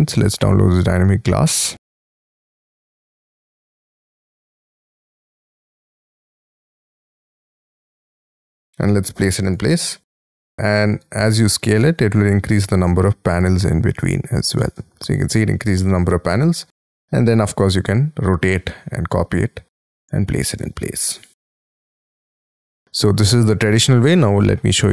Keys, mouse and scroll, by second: 0.3 scroll down 1, 8.7-9.8 scroll up 9, 9.8 middle click, 10.6-12.8 scroll down 10, 14.9-15.7 scroll up 10, 15.7 middle click, 16.9 shift+middle click, 17.5 space, 17.6-18.4 scroll up 6, 18.4 middle click, 19.4 middle click, 19.8-20.4 scroll down 11, 20.5 space, 20.6 scroll up 4, 21.7 Delete, 22.7 middle click, 24.1-24.9 scroll down 15.